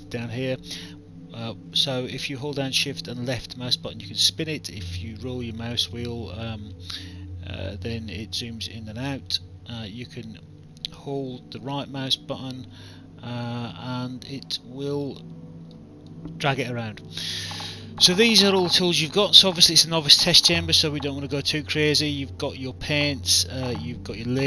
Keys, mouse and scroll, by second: 2.8 alt+click, 8.1 alt+click, 9.1 alt+right click, 12.7 right click, 15.0 right click, 16.1 right click, 16.8 alt+click.